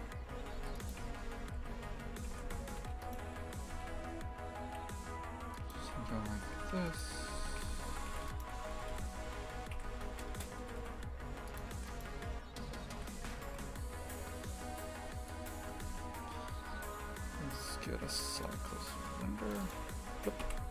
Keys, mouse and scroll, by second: 0.3 a, 0.5 ctrl+r, 3.0 right click, 3.6 g, 5.8 shift+f, 7.3 2, 7.6 a, 8.1 a, 8.2 alt+shift+right click, 8.7 g, 11.7 3, 11.9-12.9 right drag, 12.9 e, 15.7 Tab, 19.7-20.7 drag.